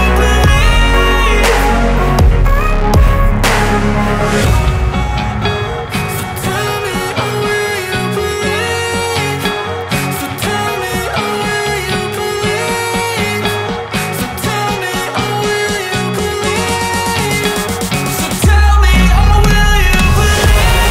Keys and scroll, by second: 4.8 Delete, 11.9 Delete, 17.4 Delete.